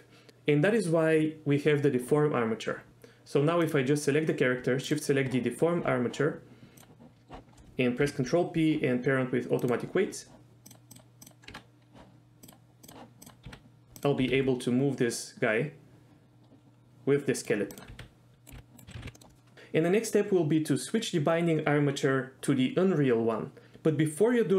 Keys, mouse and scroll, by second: 8.0 ctrl+p, 10.7 click, 10.9 click, 11.5 Tab, 12.5-12.9 drag, 13.2 click, 13.5 r, 14.0 click, 14.2 r, 14.3 r, 17.4 click, 17.7 click, 17.9 r, 18.4 right click, 18.5 r, 18.8 right click, 18.8 r, 18.9 a, 19.0 alt+g, 19.1 middle click.